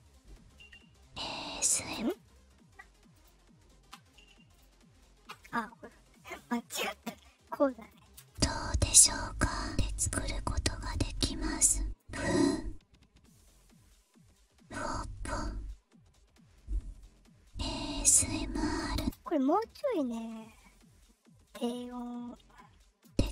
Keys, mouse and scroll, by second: 1.9 space, 3.1 click, 4.4 click, 6.3 scroll down 1, 7.7 click, 8.1 space, 9.6 click, 10.8 click, 11.9-18.7 drag, 18.9 space, 19.8 click, 21.9-23.3 drag, 23.0 space.